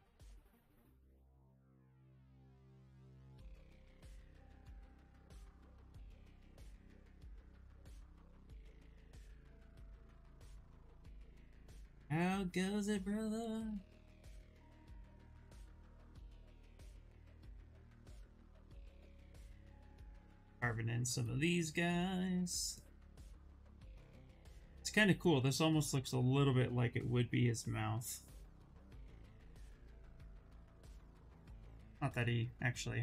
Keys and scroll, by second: 15.0 s, 25.6 ctrl+z.